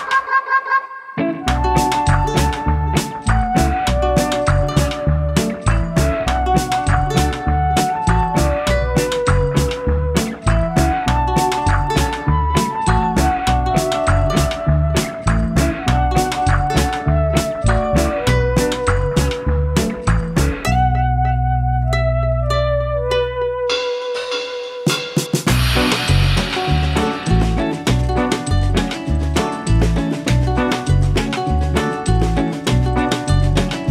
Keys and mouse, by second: 3.8 v, 4.0 click, 4.5 space, 5.9 click, 7.0 click, 8.3 typing, 11.8 click, 12.7 click, 14.6 space, 14.7 click, 14.7 space, 14.8 b, 16.3 click, 17.9 click, 18.7 click, 19.8 click, 20.7 click, 21.8 v, 22.0 click, 22.6 click, 23.8 click, 25.6 ctrl+z, 26.1 click, 27.6 [, 28.7 typing, 28.7 click.